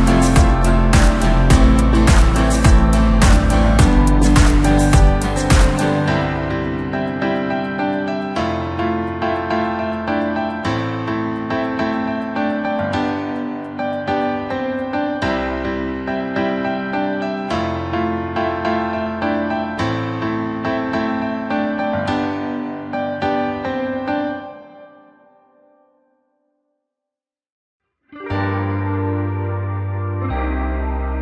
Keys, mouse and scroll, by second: 0.0 Tab, 0.5-3.7 middle drag, 3.7 KP_1, 5.3 click, 5.5-6.6 scroll up 2, 6.6 click, 6.9-7.5 scroll down 4, 7.5 Tab, 7.7-8.5 scroll up 2, 8.5 click, 8.7 click, 9.7 click, 9.9 click, 11.0 click, 11.2 click, 11.6 scroll down 2, 13.2 shift+click, 13.4 shift+click, 14.2-15.3 middle drag, 15.3 shift+b, 18.6 e, 19.5 s, 22.4-23.6 drag, 23.6 s, 28.9-29.7 scroll down 4, 29.7 KP_3.